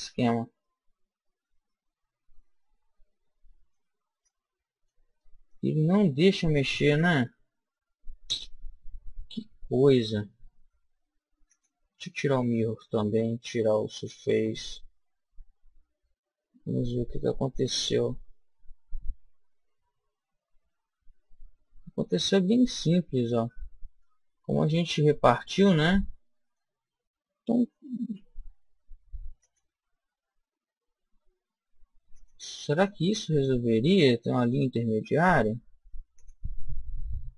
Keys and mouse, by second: 0.6-1.8 drag, 1.6 middle click, 4.2 click, 5.2 middle click, 5.9 middle click, 6.1-11.5 middle drag, 11.5 click, 12.5-14.2 middle drag, 13.9 click, 15.7 middle click, 22.4-24.9 middle drag, 25.2-27.1 middle drag, 28.2 ctrl+r, 32.3 click, 33.3-35.0 middle drag, 36.2-37.3 drag.